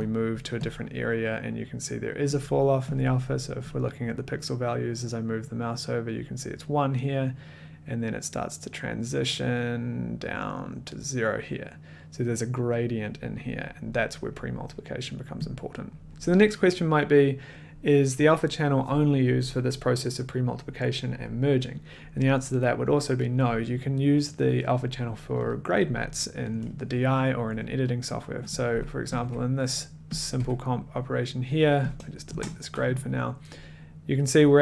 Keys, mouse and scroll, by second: 0.0 click, 0.1 middle click, 0.4 middle click, 0.7 click, 0.7 middle click, 1.0 middle click, 2.5 click, 2.9 middle click, 3.0 click, 3.0 middle click, 15.9 middle click, 15.9 click, 27.4-28.1 middle drag, 28.2 click, 29.1 click, 29.2 1, 30.2 click, 30.4 1, 32.0 click, 32.3 BackSpace, 33.0 click.